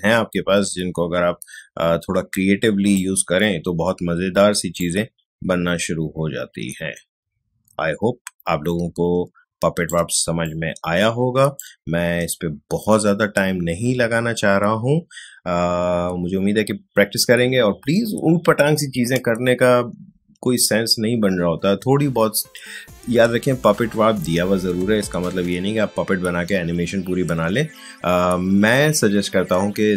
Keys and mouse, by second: 4.8-10.2 alt+drag, 10.2 space, 10.4 click, 11.6 space.